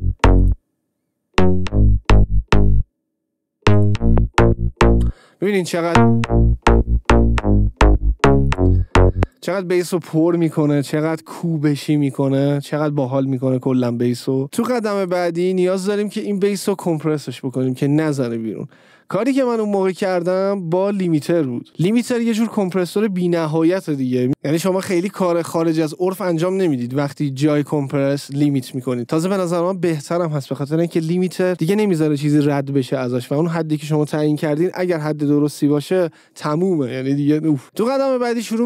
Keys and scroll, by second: 9.2 space.